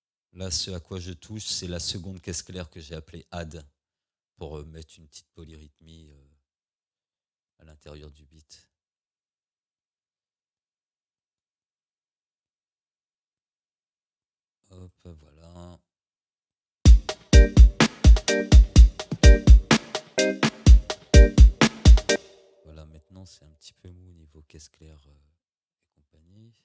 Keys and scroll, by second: 16.8 space, 22.1 space.